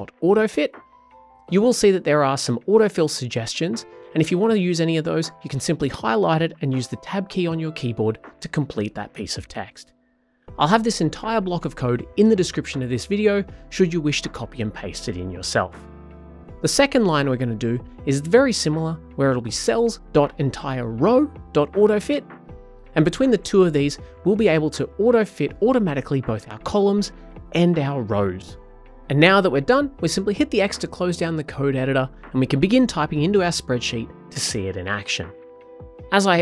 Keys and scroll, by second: 0.7 typing.